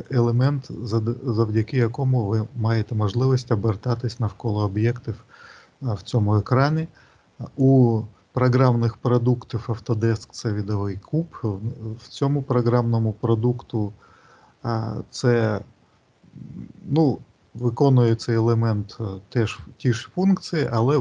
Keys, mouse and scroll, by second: 15.3 click.